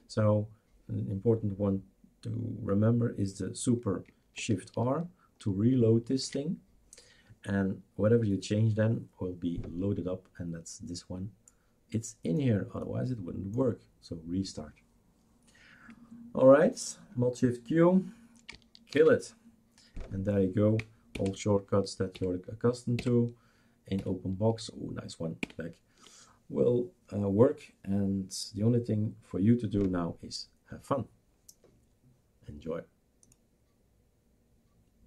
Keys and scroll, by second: 6.5 shift+super+r, 18.9 shift+super+q, 21.2 alt+Right, 22.1 alt+Right, 23.0 alt+Right, 24.0 alt+Right, 25.4 alt+Left.